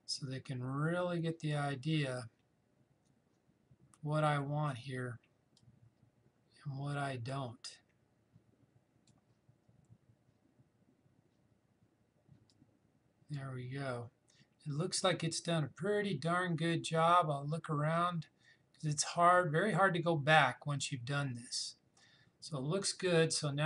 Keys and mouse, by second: 5.6-11.7 drag, 12.5-23.6 drag.